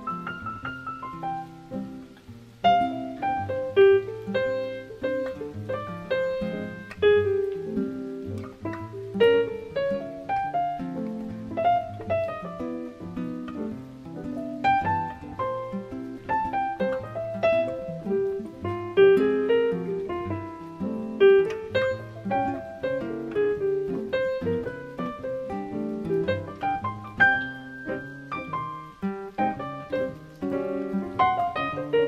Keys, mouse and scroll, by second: 1.0 shift+middle click, 3.9 click, 24.4 click.